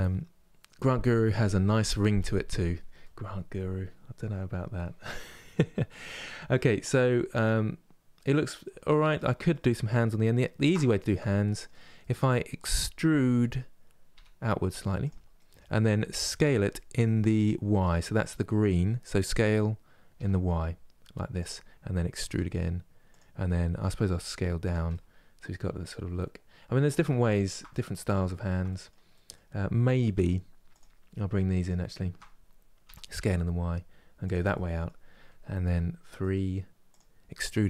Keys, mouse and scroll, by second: 5.8-6.2 scroll down 2, 6.2-9.9 middle drag, 9.9-10.3 scroll up 2, 10.3-13.8 middle drag, 13.8 e, 15.1-16.1 middle drag, 16.1 s, 21.9 e, 24.6-29.8 middle drag, 29.8 2, 30.4 click, 31.3 shift+click, 32.5 s, 34.2-35.3 middle drag, 35.3 3, 35.8 middle click, 36.6 click, 37.4 e.